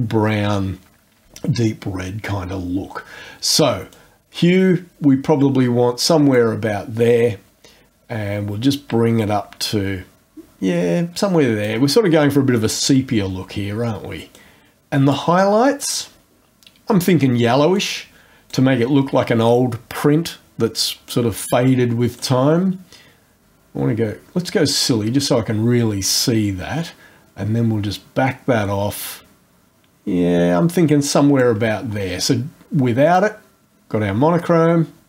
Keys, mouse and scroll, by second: 3.9-6.5 drag, 7.1-11.8 drag, 14.3 click, 16.3 scroll up 1, 17.8 click, 22.2-31.6 drag, 33.1 click.